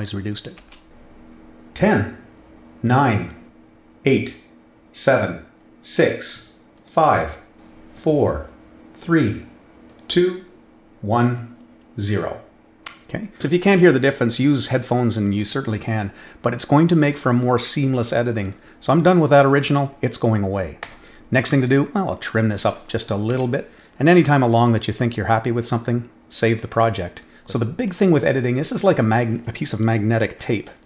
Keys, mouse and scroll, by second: 0.6 space, 3.2 click, 6.7 click, 9.8 click, 19.3 click, 20.8 click, 21.9-22.3 drag, 24.2 click, 26.3 click, 27.0 click, 27.8 click, 30.4 ctrl+f, 30.7 click.